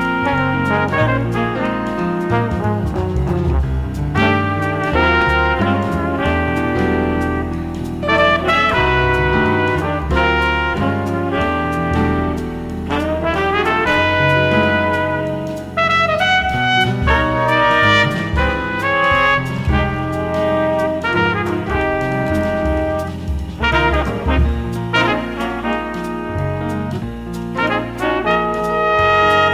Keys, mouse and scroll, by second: 0.0 KP_3, 6.8-8.6 drag, 11.9-13.4 middle drag, 13.4-13.8 scroll up 1, 13.8-15.5 drag, 14.8-19.3 middle drag, 19.6-21.7 drag, 24.5-28.0 drag.